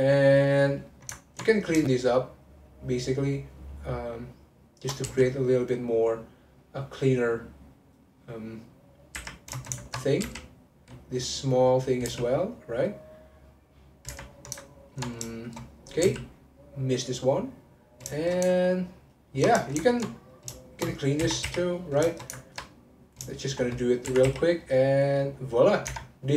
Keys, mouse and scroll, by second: 1.2 ctrl+middle click, 1.5 click, 1.8 shift+click, 2.4 shift+click, 3.0 shift+click, 3.3 shift+click, 3.5 shift+middle click, 4.7 shift+click, 5.0 x, 9.6 ctrl+shift+middle click, 10.2 3, 10.8 click, 11.6 click, 12.1 x, 14.1 1, 14.6-15.9 ctrl+middle drag, 15.9 click, 16.0 x, 18.2-20.3 shift+middle drag, 20.3 click, 20.5 shift+click, 21.2 m, 22.1 ctrl+shift+middle click, 23.1 click, 24.0 m, 25.5-25.9 scroll down 1, 25.9 Tab.